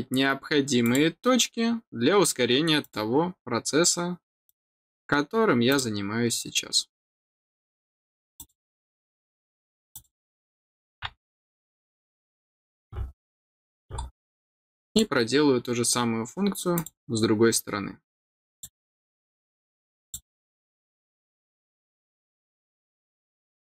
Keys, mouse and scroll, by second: 0.8 click, 2.8 click, 4.4 click, 5.7 click, 8.3 click, 9.9 click, 11.3 scroll down 1, 11.6 middle click, 12.5 scroll down 1, 13.3 middle click, 14.3 scroll up 1, 14.9 click, 16.7 click, 18.5 click, 20.0 click, 21.1 scroll up 1, 22.1 scroll down 1, 22.5 middle click.